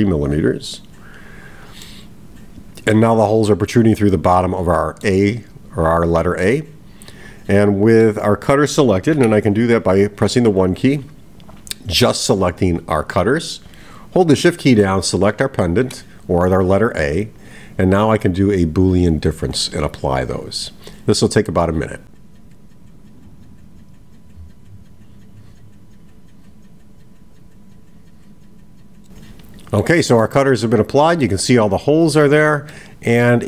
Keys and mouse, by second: 0.0-1.1 drag, 1.8-3.0 middle drag, 4.4-5.2 middle drag, 6.5-8.1 middle drag, 10.5 click, 11.3-12.9 drag, 15.5 shift+click, 21.4-28.8 drag, 29.0-30.0 middle drag, 30.3-31.3 middle drag, 32.7-33.4 middle drag.